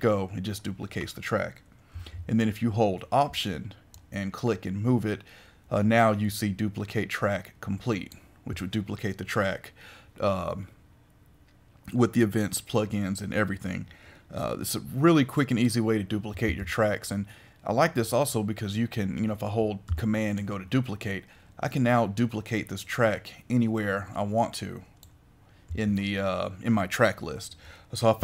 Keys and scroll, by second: 2.1 super+z, 16.4 super+z.